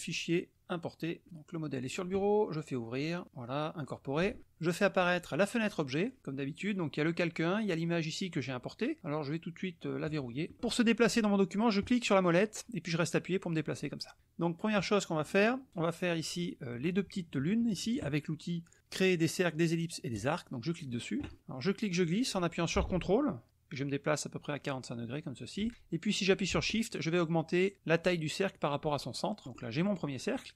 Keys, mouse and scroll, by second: 0.0 click, 1.7 click, 2.9 click, 3.8 click, 5.0 click, 6.1 click, 6.6 click, 7.6-8.4 drag, 10.0 click, 10.5 click, 11.8-14.2 drag, 20.2 click, 21.9-29.4 drag.